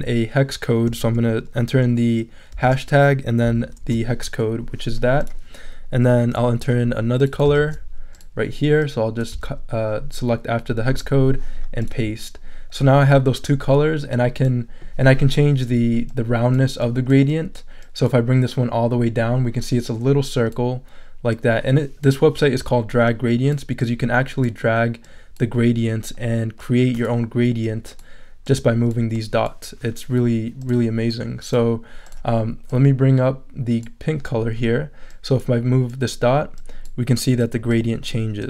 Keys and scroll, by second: 2.5 shift+3, 3.4 shift+super+3, 7.6 super+c, 10.9 super+v.